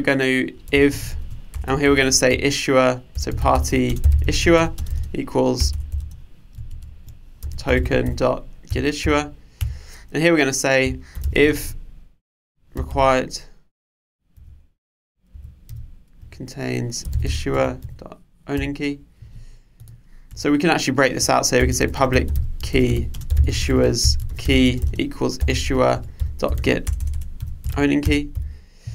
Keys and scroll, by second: 6.8 alt+Return, 8.9 Return, 14.4 Return, 26.0 Return.